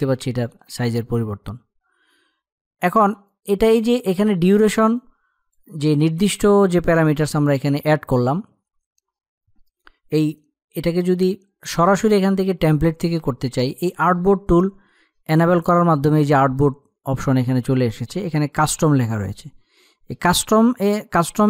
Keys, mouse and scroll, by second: 2.9-9.7 drag.